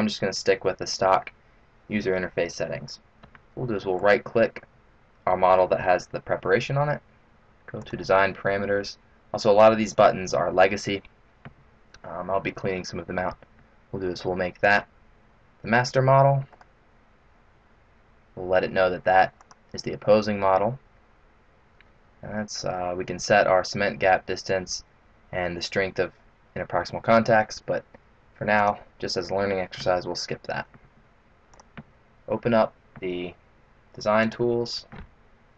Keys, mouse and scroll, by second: 4.4 right click, 7.8 click, 14.6 click, 16.7 right click, 19.4 click, 28.6 click, 31.5 click, 34.2 click.